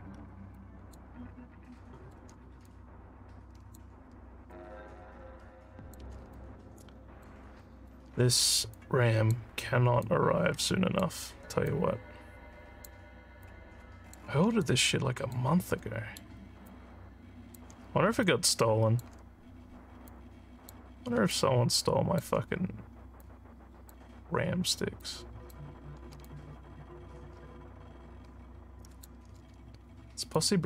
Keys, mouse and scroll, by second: 0.2 alt+scroll, 0.5 alt+click, 1.2 scroll, 1.8 alt+middle click, 2.7-3.8 drag, 4.5-5.9 drag, 6.3 alt+click, 7.6 alt+middle click, 8.7 click, 10.0 click, 11.7-12.8 drag, 13.4 click, 14.6 alt+click, 15.9 alt+middle click, 16.7 alt+click, 18.3 alt+click, 20.1 click, 21.3 alt+click, 23.2 click, 25.0 click, 26.2-29.1 alt+drag, 30.4-30.6 drag.